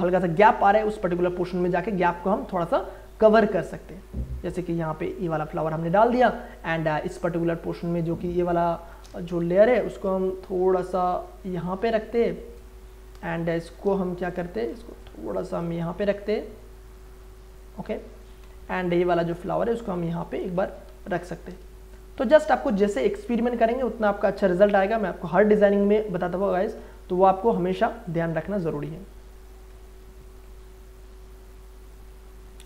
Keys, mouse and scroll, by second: 3.3-6.6 drag, 8.1-8.9 scroll up 1, 8.9 click, 9.4 ctrl+t, 10.9-12.4 drag, 12.4 Return, 13.2 click, 14.6 ctrl+t, 15.3-18.3 drag, 18.3 Return, 18.9 click, 19.4-20.9 alt+drag, 20.8 ctrl+t, 21.1 ctrl+right click, 21.9 ctrl+click, 22.9 ctrl+right click, 23.8 ctrl+click, 25.5 ctrl+right click, 26.4 ctrl+click, 27.5 click, 28.7 click, 29.5 Return, 32.0 click.